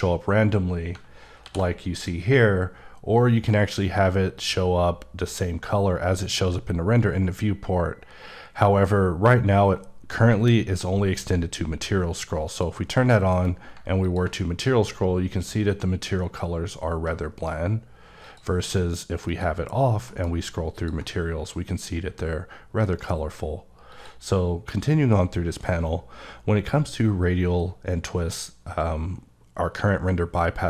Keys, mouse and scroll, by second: 0.7 alt+click, 1.3 alt+m, 1.9 click, 4.3 click, 12.4 click, 13.3 alt+m, 14.0 ctrl+click, 14.3-16.8 scroll up 15, 17.3 right click, 18.2 click, 19.2 click, 20.0 m, 20.7 click, 21.0-22.7 scroll up 9, 22.7 right click, 23.8 click.